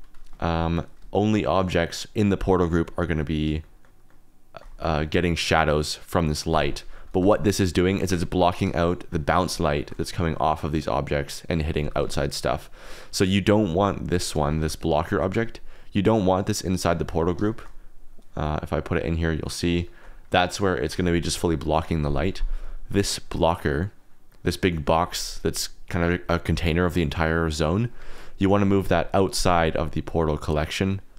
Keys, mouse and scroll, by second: 0.3 shift+middle drag, 3.6 shift+click, 4.1 shift+click, 7.2 g, 7.9 Escape, 8.8 shift+click, 9.6 shift+click, 11.3 click, 11.8 g, 12.0 x, 13.5 click, 14.5 g, 15.2 Escape, 16.2-16.5 drag, 17.5-18.2 shift+middle drag, 18.6-19.3 drag, 19.8-20.3 shift+middle drag, 20.4 shift+middle click, 24.2 middle drag, 29.6-30.8 drag.